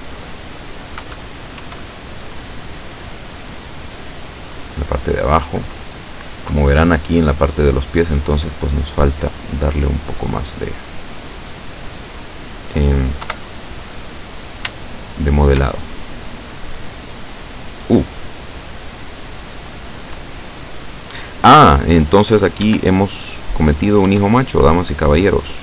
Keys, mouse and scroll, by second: 1.1 KP_6, 1.7 KP_1, 3.4-3.7 scroll down 2, 3.9 scroll down 2, 8.1 click, 9.0 click, 10.1 click, 11.3-13.1 drag, 13.3 KP_7, 14.9 shift+click, 15.9-17.0 shift+drag, 17.2 click, 18.2-18.5 scroll up 2, 18.8-20.1 drag, 21.4-22.6 drag, 22.7 Tab, 23.7 right click, 24.1 Tab.